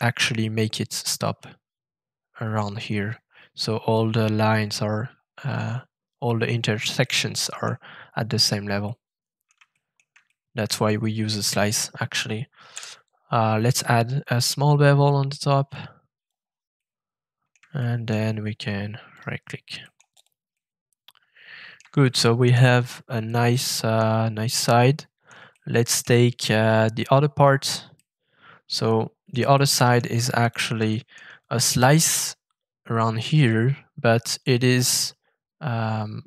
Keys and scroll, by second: 12.7 b.